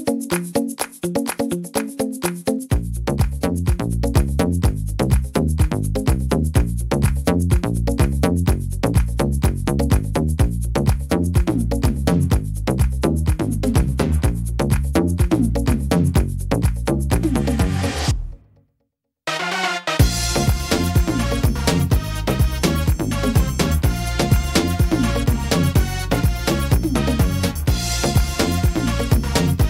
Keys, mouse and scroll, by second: 8.1 scroll down 4, 8.1 r, 9.6 click, 17.1 click, 17.1 middle click, 17.5-18.1 scroll down 2, 18.1 shift+middle click, 18.4-19.0 scroll up 2, 18.8 middle click, 22.1-22.7 scroll up 2, 22.7 scroll up 1, 22.9 shift+middle click, 23.7 scroll up 2, 24.4 right click, 25.4 l, 26.5 scroll down 1, 29.0 scroll down 1, 29.2 alt+s.